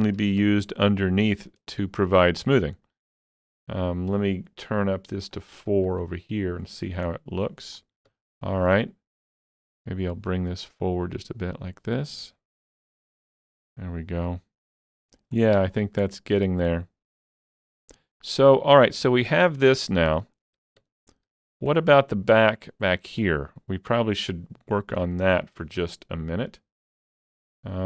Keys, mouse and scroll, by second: 0.2 alt+a, 0.4 Tab, 0.7-1.3 scroll down 2, 1.3-3.4 middle drag, 3.4-5.9 shift+middle drag, 5.4 click, 5.9 click, 6.8-7.1 scroll down 3, 7.1 middle click, 8.1 Tab, 8.3-9.2 scroll up 2, 9.2 click, 9.7 middle click, 10.6-13.0 drag, 12.7 Tab, 13.0 scroll down 2, 13.3-15.8 middle drag, 15.6 Tab, 15.8-16.1 scroll up 4, 16.1-20.6 middle drag, 17.6 click, 18.2-21.3 drag, 20.6 alt+a, 20.8 Tab, 21.3 alt+a, 21.4-21.8 alt+scroll down 4, 21.8-27.8 middle drag, 26.9 click.